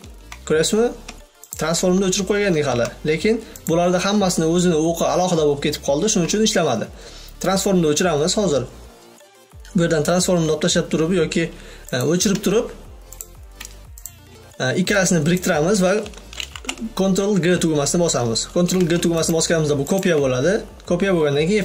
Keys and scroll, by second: 1.8 v, 16.9 ctrl+g.